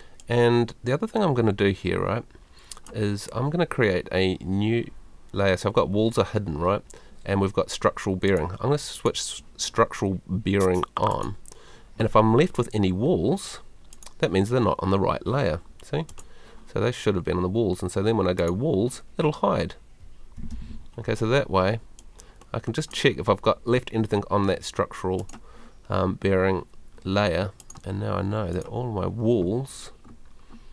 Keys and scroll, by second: 20.5 super+l.